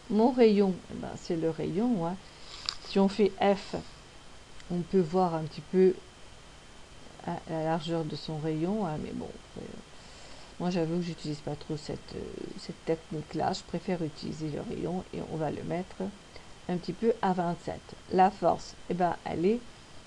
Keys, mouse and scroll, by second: 4.3 f, 11.7 click, 13.9 click.